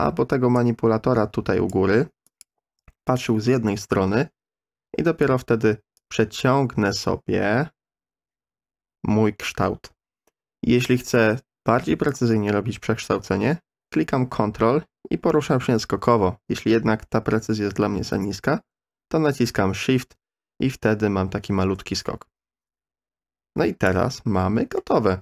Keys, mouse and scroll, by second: 0.6-1.7 drag, 2.3 click, 6.0-23.9 drag, 24.8-25.2 middle drag.